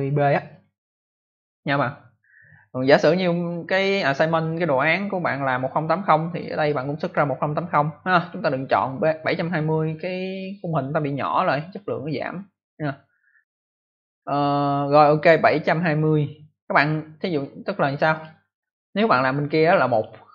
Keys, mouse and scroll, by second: 0.4 click, 18.1 click, 19.8 click, 19.9 click.